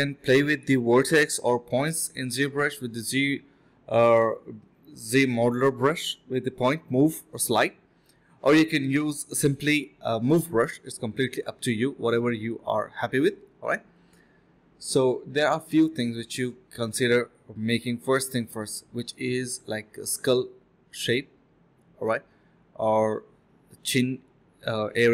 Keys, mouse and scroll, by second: 0.6 alt+click, 0.9 alt+click, 1.0 alt+click, 3.3 alt+click, 3.7 alt+click, 3.7 ctrl+b, 4.1 typing, 6.3 ctrl+b, 6.7 typing, 7.8 typing, 8.0 alt+click, 9.8 alt+click, 10.0 alt+click, 10.1 alt+click, 10.7 ctrl+b, 11.6 1, 13.7 alt+click, 15.8 alt+click, 16.2 alt+click, 17.1 alt+click, 18.6 ctrl+b, 18.9 ctrl+b, 19.1 double click, 19.5-20.0 2, 21.8 alt+click, 22.6 alt+click, 23.1 alt+click.